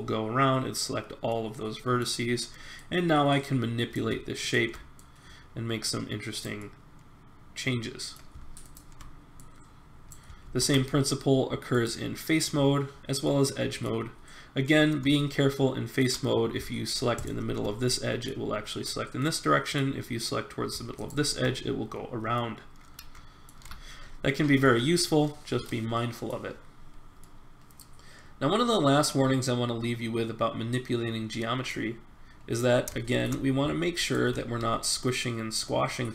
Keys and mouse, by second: 1.3 middle click, 1.6 middle click, 2.7 click, 5.0-6.5 drag, 6.6-8.2 middle drag, 9.5 middle click, 10.4 ctrl+Tab, 15.5 middle click, 17.8-20.8 middle drag, 20.9-22.3 drag, 22.3 middle click, 22.8 middle click, 23.2 middle click, 23.6 a, 23.7 click, 27.4-29.3 middle drag, 31.8 middle click, 32.3 middle click, 33.1 middle click, 34.1 middle click, 34.5 s.